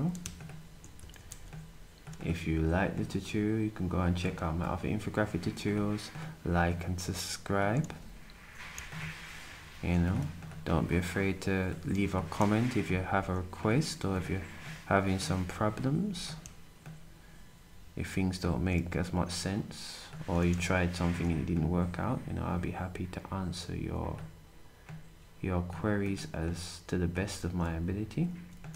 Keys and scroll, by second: 1.2 ctrl+shift+d.